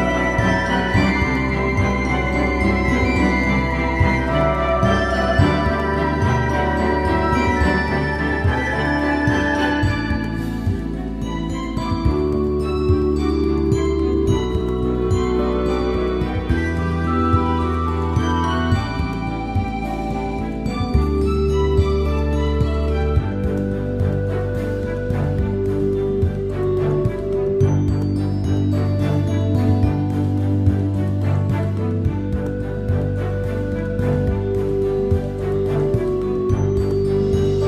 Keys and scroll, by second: 3.2 Return, 4.8 super+0.